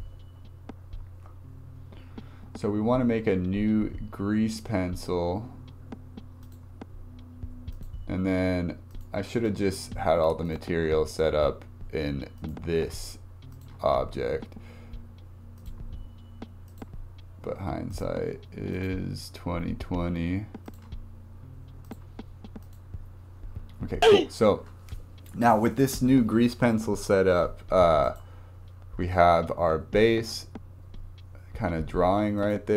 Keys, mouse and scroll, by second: 1.1 shift+a, 7.7 click, 8.9 click, 12.4-23.2 drag, 23.2-23.5 scroll down 3, 23.6-24.0 scroll up 1, 26.7-27.3 scroll down 4, 28.0 click, 32.4-32.7 drag.